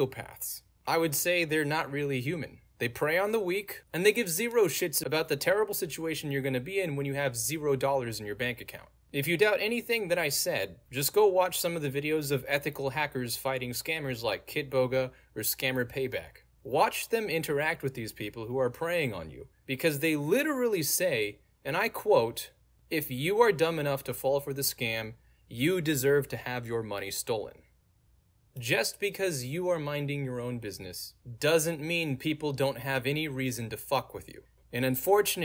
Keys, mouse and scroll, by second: 11.6 click, 25.7 click.